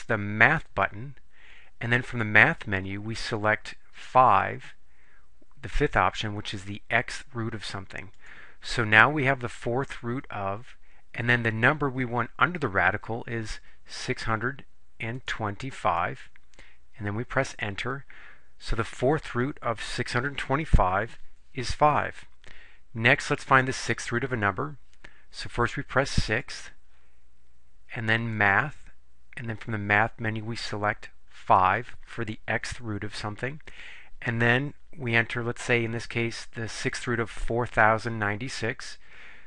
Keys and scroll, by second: 8.3 5, 14.1 6, 15.3 2, 16.1 5, 17.6 Return, 26.4 6, 31.5 5.